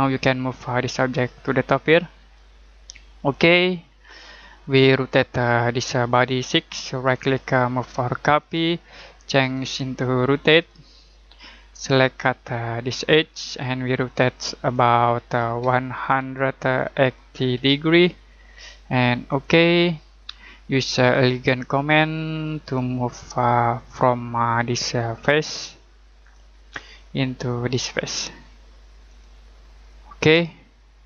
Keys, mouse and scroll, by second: 0.9 click, 3.9 middle click, 6.1 click, 7.0 right click, 8.4 click, 13.0 click, 16.2-17.5 typing, 19.3 click, 26.2 click, 26.9 middle click, 29.1 click, 29.9 middle click, 30.5 middle click.